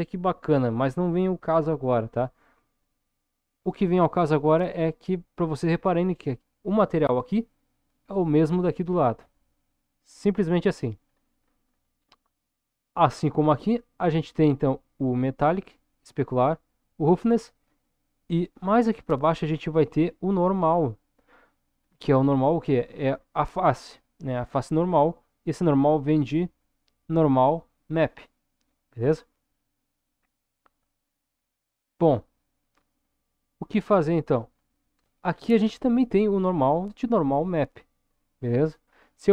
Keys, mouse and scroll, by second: 11.0-12.7 scroll down 4, 18.7 middle click.